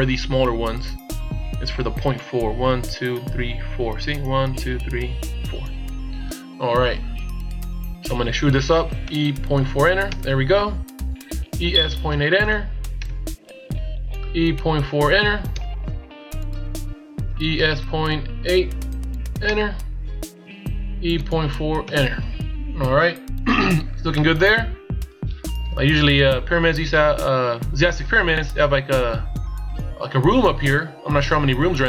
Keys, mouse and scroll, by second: 8.9 e, 11.2 e, 14.1 e, 17.2 e, 20.8 e, 22.4-23.0 shift+scroll up 3, 23.0 scroll down 1, 24.0 middle click, 25.5 KP_1.